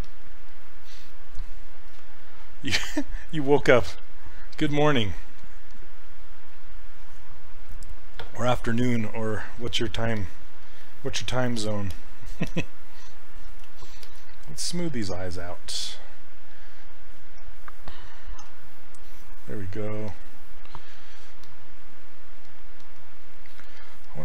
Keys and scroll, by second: 18.5 d.